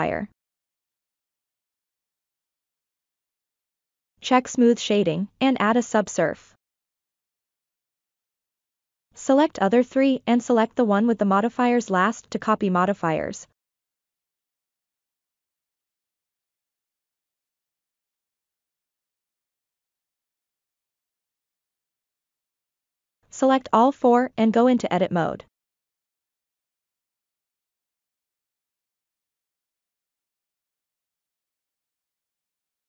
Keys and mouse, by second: 0.2 click, 4.4 click, 5.7 ctrl+2, 9.0 click, 9.6 shift+click, 12.7-14.1 drag, 15.8-16.6 drag, 18.5-19.4 ctrl+middle drag, 20.7 Tab, 21.4 alt+z, 22.3 Tab, 24.0 click, 24.6 Tab, 27.2-28.4 ctrl+middle drag, 31.1-31.8 drag, 32.1 shift+click.